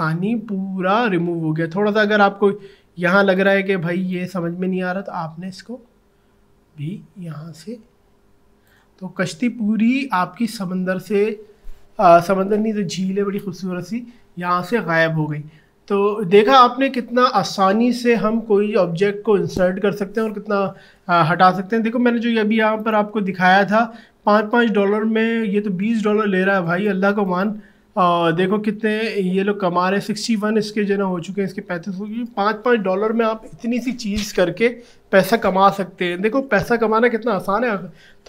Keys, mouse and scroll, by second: 0.8 alt+scroll up 1, 3.4-9.0 alt+drag, 9.0 alt+scroll down 1, 22.8 click, 27.2 click, 28.1 scroll up 1.